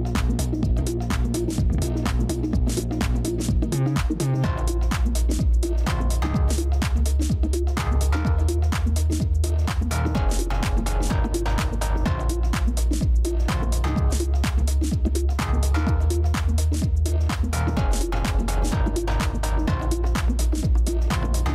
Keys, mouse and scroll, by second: 3.1-4.6 scroll up 1.